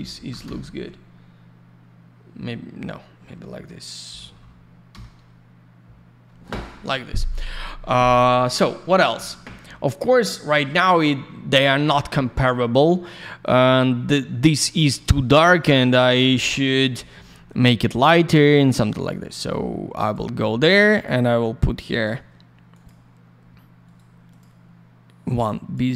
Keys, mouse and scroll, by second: 0.0-0.7 typing, 4.9 Return, 13.0 middle click, 13.1 middle click, 13.3 scroll down 1, 13.6 middle click, 15.4 click, 15.5 click, 17.7 scroll up 1, 19.0 click, 19.0 click, 20.0 click, 20.1 click, 20.9 click, 21.0 click, 21.9 click, 22.0 click, 22.7 click, 22.8 click, 23.8 right click, 23.9 right click, 24.2 click, 24.3 double click, 25.2 click.